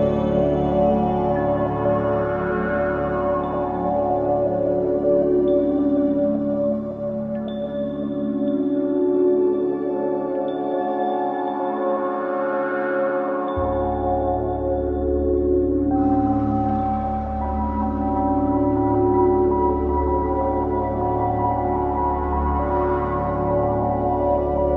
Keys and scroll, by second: 0.3 v, 4.3 shift+space, 6.8 v, 19.3 v, 20.7 c.